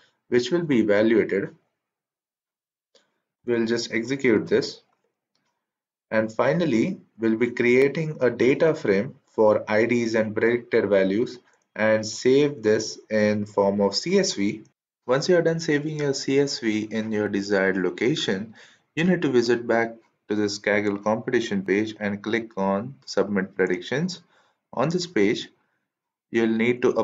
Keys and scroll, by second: 4.2 shift+Return.